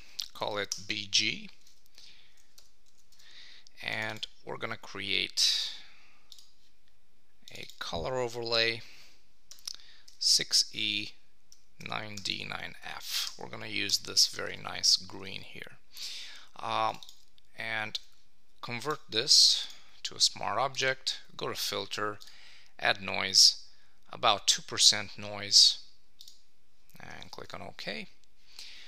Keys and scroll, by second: 0.7 Return, 1.7 super+a, 13.2 Return, 15.3 super+s.